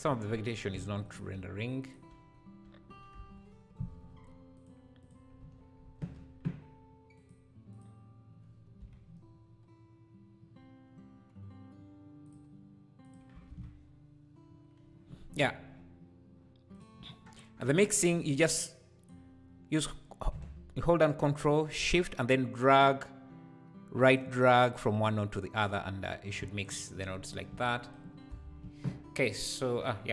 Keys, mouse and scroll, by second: 0.0-1.2 drag, 2.1 /, 2.6 /, 3.1 KP_0, 4.6 click, 5.0 click, 5.4 z, 6.0 ctrl+s, 7.2-8.8 drag, 8.8 KP_Decimal, 12.2-16.8 drag, 13.5 ctrl+s, 15.3 scroll down 1, 17.2 scroll down 1, 17.5-18.1 scroll up 10, 18.1-24.2 drag, 24.2-26.9 ctrl+shift+right drag, 26.9-30.1 drag, 28.5 ctrl+s.